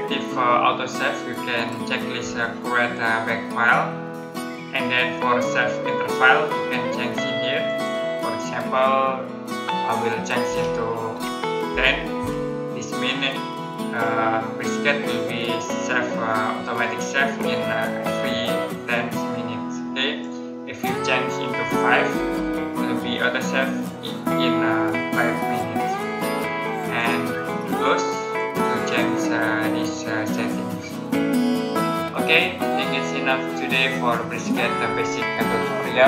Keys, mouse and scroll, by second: 0.8-3.6 scroll down 1, 6.3-7.5 scroll down 1, 7.5 click, 10.3-12.0 typing, 20.1 click, 22.0 typing, 26.8 click.